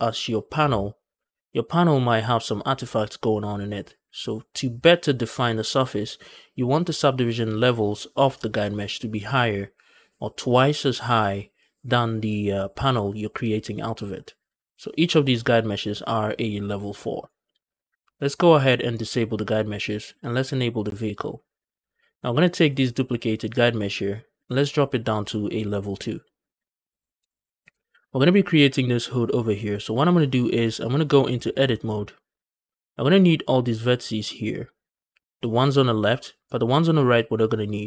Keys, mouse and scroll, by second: 15.6 click, 16.3 click, 17.0 click, 19.3 click, 20.9 click, 22.4 click, 25.0 click, 25.4 click, 27.3 scroll up 1, 27.7 shift+middle drag, 27.9-28.5 scroll up 2, 31.0 Tab, 31.5 shift+middle click, 31.8-32.2 scroll up 2, 32.3 shift+middle click.